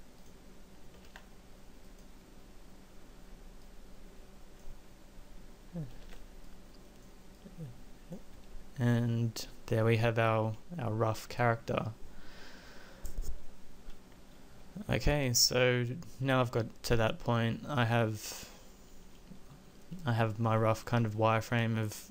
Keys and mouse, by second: 1.1 ctrl+a, 6.0 z.